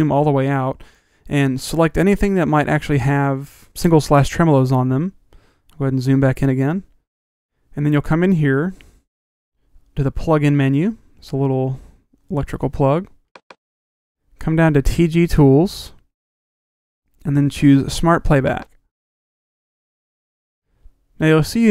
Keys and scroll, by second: 6.0 super+=.